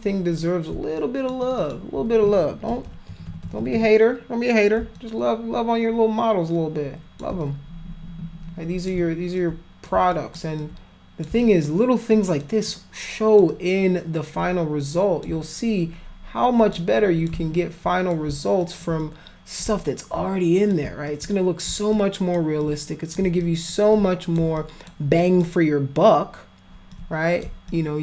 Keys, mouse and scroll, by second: 1.0 alt+click, 1.5 alt+click, 1.6 alt+click, 2.7-3.8 typing, 5.0-7.2 alt+drag, 7.5-8.9 shift+drag, 9.4 alt+click, 10.1 alt+click, 10.6 alt+click, 11.4 alt+click, 12.1 alt+click, 12.7 alt+click, 13.5-15.2 alt+drag, 15.4-16.7 shift+drag, 16.8 shift+click, 17.6 alt+click, 18.6 alt+click, 19.0 click, 19.8 alt+click, 21.1 alt+click, 21.9 alt+click, 22.6 click, 23.4 alt+click, 24.0 click, 24.6 alt+click, 25.2 alt+click, 27.0 click, 27.7 alt+click.